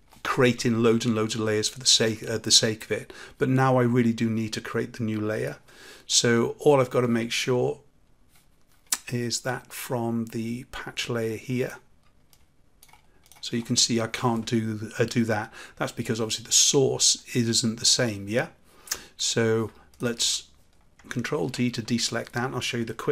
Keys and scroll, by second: 21.3 ctrl+d.